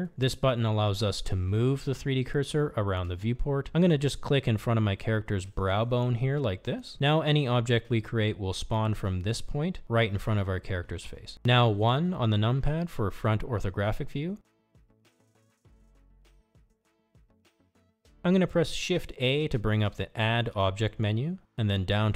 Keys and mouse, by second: 0.5 click, 7.1 click, 9.3-9.7 shift+middle drag, 10.4 shift+middle drag, 13.4 KP_1, 17.3 click, 20.3 shift+a.